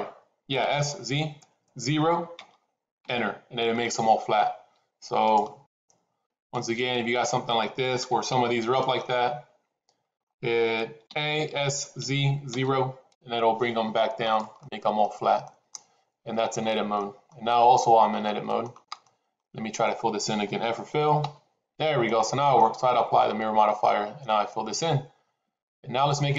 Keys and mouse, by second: 3.7 middle click, 6.9 click, 7.9 g, 9.0-10.1 middle drag, 11.0 a, 11.4 s, 14.6 middle click, 15.3 middle click, 16.8 middle click, 18.1 shift+middle click, 18.9 middle click, 21.1 f, 22.0 middle click, 23.7-26.3 middle drag.